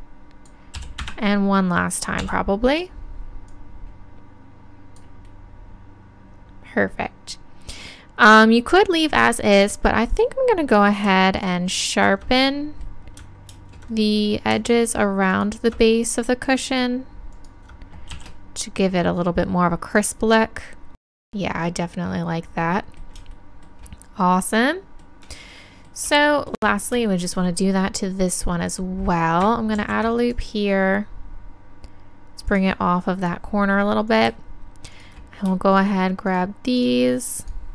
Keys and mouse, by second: 0.8 e, 2.3 s, 10.2-12.5 drag, 11.4-12.5 right drag, 12.5-18.2 middle drag, 18.2 shift+e, 20.1 click, 21.0-22.6 middle drag, 22.9-25.4 middle drag, 25.4-26.6 middle drag, 29.7 ctrl+r, 32.5-34.5 drag, 34.1 right click.